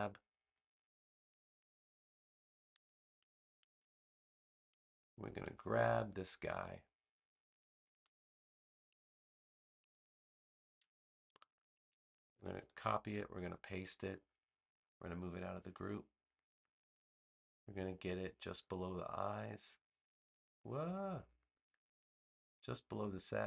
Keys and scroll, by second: 12.1 super+c, 12.9 super+v.